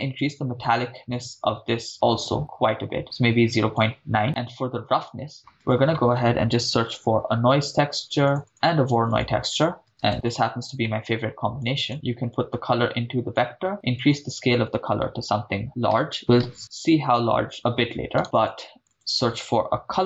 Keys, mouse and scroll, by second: 0.2-4.0 drag, 4.2 middle click, 5.3 shift+a, 8.9 shift+a, 10.8 middle click, 11.6 click, 12.3-13.4 drag, 16.4-18.2 drag, 18.2 middle click, 18.5 click, 18.8 shift+a.